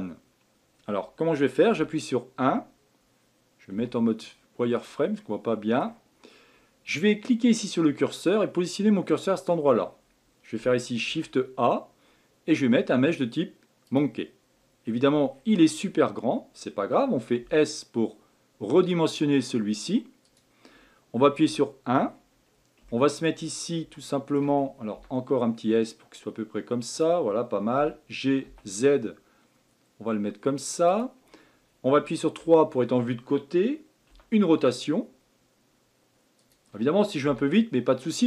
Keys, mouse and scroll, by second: 1.7 KP_1, 3.7 z, 5.2-7.5 middle drag, 7.5-9.4 drag, 11.0 shift+a, 14.8-15.4 scroll down 10, 17.4 s, 21.4 KP_1, 22.1-22.9 scroll up 4, 22.9-23.6 shift+middle drag, 23.6-24.0 scroll up 3, 24.0-24.9 shift+middle drag, 24.9 s, 32.4 KP_3, 34.1 r.